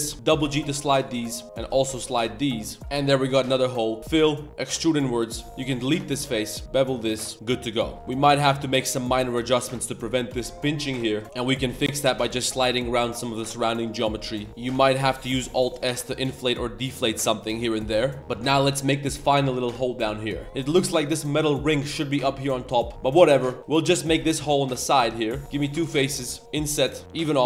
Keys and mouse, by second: 2.8 Tab, 2.8 1, 2.8 shift+s, 3.0 shift+middle click, 3.3 middle click, 3.6 middle click, 3.9 middle click, 4.0 f, 4.4 e, 6.5 alt+click, 6.6 ctrl+b, 7.3 Tab, 7.3 ctrl+s, 7.3-8.0 middle drag, 7.9 Tab, 8.2 middle click, 8.5 Tab, 8.7 middle click, 9.5 middle click, 9.7 middle click, 10.0 middle click, 10.3 middle click, 10.6 Tab, 10.9 click, 11.3 Tab, 11.3 g, 11.4 click, 11.7 1, 12.0 g, 12.7 click, 13.1 shift+click, 13.4 middle click, 13.7 shift+middle click, 14.0 middle click, 14.4 click, 14.5 Tab, 14.6 click, 14.9 shift+click, 15.2 alt+s, 17.6 middle click, 18.0 Tab, 18.0 middle click, 18.2 ctrl+s, 20.3 middle click, 20.6 Tab, 22.6 middle click, 22.9 middle click, 25.6 ctrl+shift+click, 25.9 shift+middle click, 26.4 i.